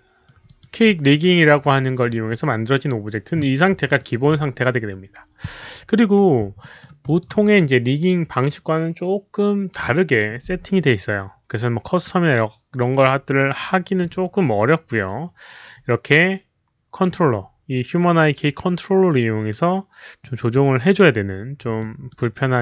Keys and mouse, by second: 0.4 alt+click, 0.8 alt+middle click, 1.1 alt+right click, 3.9 alt+click, 6.5 alt+middle click, 6.7 alt+right click, 7.0 alt+click, 7.1 alt+right click, 8.3 alt+click, 8.3 alt+middle click, 9.7 alt+click, 9.7 alt+middle click, 9.7 alt+right click, 11.3 alt+click, 11.3 alt+middle click, 11.3 alt+right click, 12.0 alt+click, 12.0 alt+middle click, 14.8 alt+click, 14.8 alt+middle click, 16.8 alt+click, 16.8 alt+middle click, 21.7-22.0 alt+middle drag.